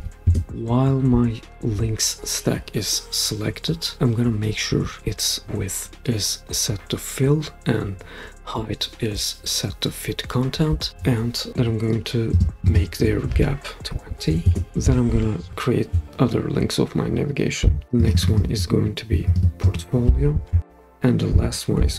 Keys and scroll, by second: 0.0-0.4 typing, 13.6-14.5 typing, 17.8 super+d, 20.6 typing, 21.7 super+d.